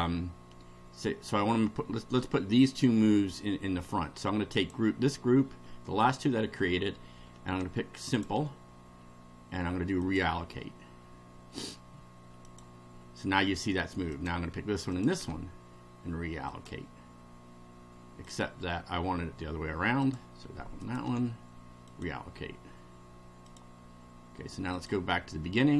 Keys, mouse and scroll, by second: 4.6 click, 8.0 ctrl+click, 10.0 click, 12.4 click, 14.1 click, 14.9 ctrl+click, 16.5 click, 18.2 click, 20.0 click, 20.8 ctrl+click, 21.9 click, 23.5 click, 24.7 click.